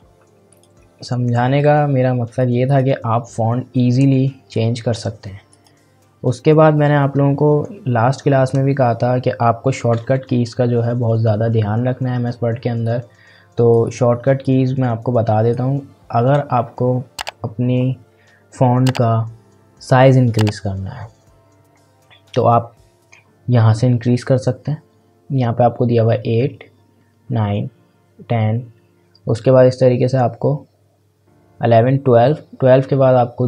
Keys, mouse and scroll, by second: 5.5 click, 12.8-17.8 drag, 24.2 click.